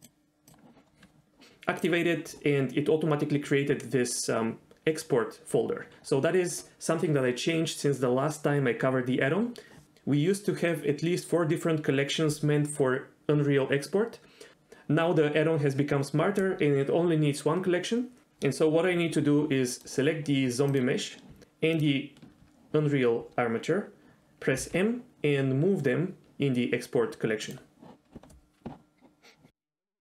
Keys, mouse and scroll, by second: 20.0 middle click, 22.0 shift+click, 24.8 m.